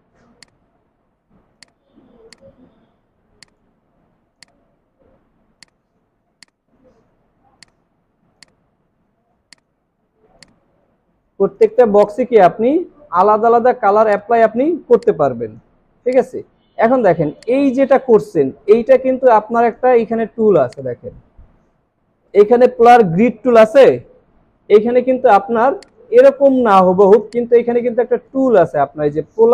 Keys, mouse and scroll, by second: 12.0 double click, 13.0 alt+scroll up 1, 13.6 alt+scroll down 1, 14.7 alt+scroll down 1, 15.4 space, 20.6 right click, 27.2 alt+shift+click.